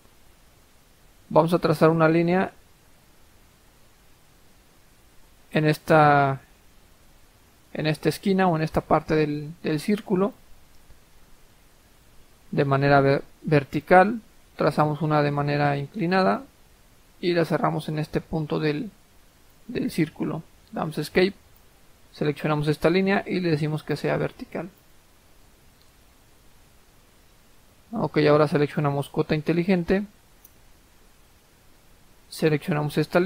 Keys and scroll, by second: 20.5 Escape.